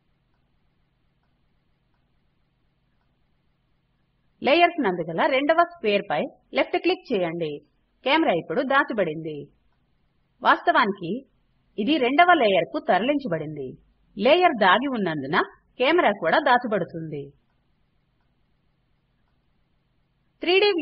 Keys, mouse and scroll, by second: 1.8 click.